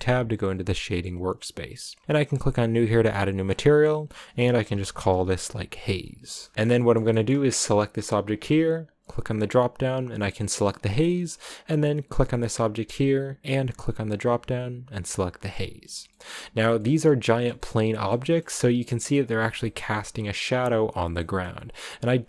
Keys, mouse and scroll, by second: 0.2 click, 2.6 click, 3.5-4.2 scroll down 6, 4.2-6.5 drag, 6.5 middle click, 6.6 scroll down 1, 6.8 shift+middle click, 7.7 right click, 9.4-11.0 drag, 11.0 shift+middle click, 12.0 right click, 15.1 click, 16.0-18.3 shift+middle drag, 18.3-18.7 scroll up 5, 18.7-22.2 middle drag.